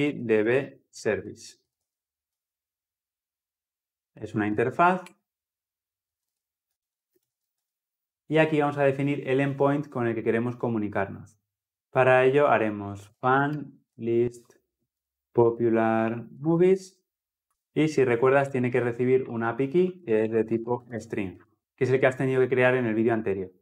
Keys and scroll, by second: 4.9 Return, 21.2 Escape.